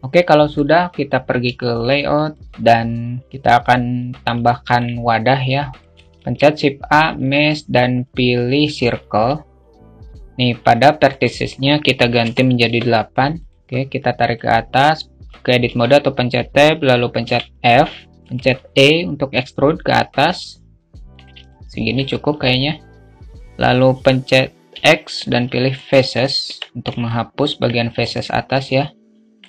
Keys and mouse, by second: 1.1 alt+shift+middle click, 1.7 alt+middle click, 3.9 alt+middle click, 4.9 click, 5.8 shift+a, 10.4-12.4 drag, 13.6-15.1 drag, 15.1 Tab, 16.7 f, 20.9 alt+middle click, 24.1 x, 26.2 Tab, 26.5 alt+middle click, 27.5 alt+middle click, 28.0-28.7 alt+middle drag.